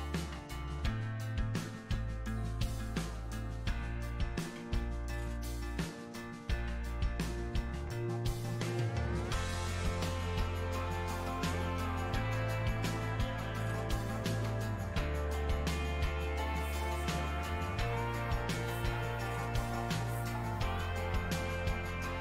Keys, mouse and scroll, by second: 0.2-1.7 drag, 1.7 middle click, 2.1-4.2 shift+drag, 4.2-10.5 middle drag, 10.5 shift+c, 11.2 f, 12.1-13.8 drag, 13.8 middle click, 14.3 click, 15.1 middle click, 16.0-17.7 drag, 17.7-22.0 middle drag, 22.0 f.